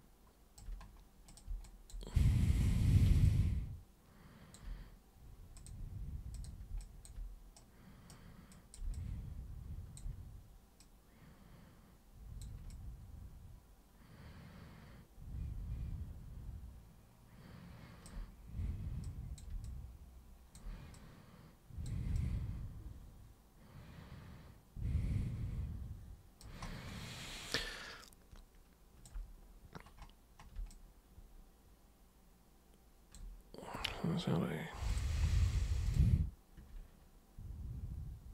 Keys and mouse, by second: 1.3 alt+super+click, 1.6 alt+super+drag, 2.1 super+w, 2.8 super+1, 3.2-4.5 alt+super+drag, 5.6 super+click, 6.3 super+click, 6.8 alt+super+click, 7.5 super+right click, 8.5 super+click, 8.9-9.9 alt+super+drag, 10.7 super+click, 12.7-18.0 alt+super+drag, 19.0-19.4 super+drag, 19.6-20.5 alt+super+drag, 20.9 super+click, 22.2-26.4 alt+super+drag, 27.6-29.0 alt+super+drag, 30.7-33.1 alt+super+drag, 34.8 super+click, 35.8 super+click.